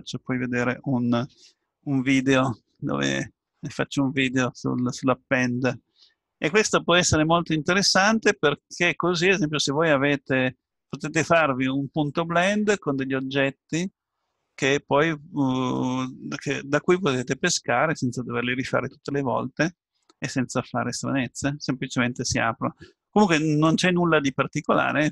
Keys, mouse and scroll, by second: 14.1-15.8 middle drag, 16.2-17.5 middle drag, 23.6-25.1 drag.